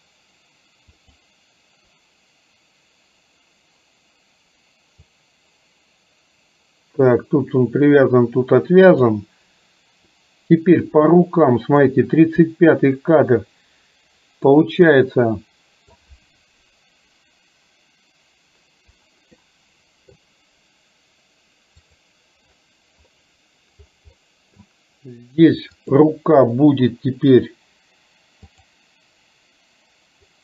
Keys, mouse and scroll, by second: 1.0 click, 5.2-9.2 drag, 11.0-12.0 drag, 14.6-16.1 middle drag, 19.6-20.2 middle drag, 22.0 click, 24.2 middle click, 25.8 click, 28.6 click.